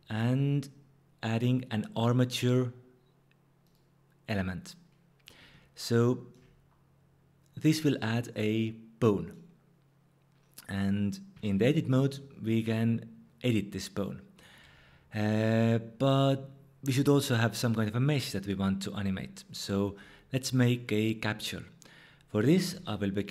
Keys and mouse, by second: 11.3 Tab, 12.6-14.4 drag, 14.6 Tab, 15.4 click, 22.7 shift+a.